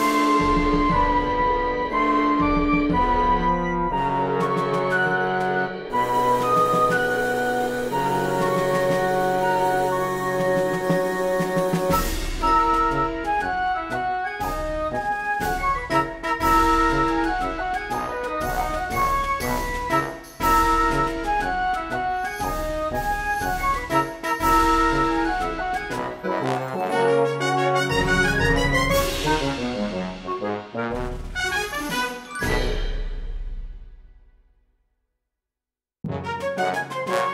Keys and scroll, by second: 4.8 shift+b, 5.6 a, 10.2-11.9 typing.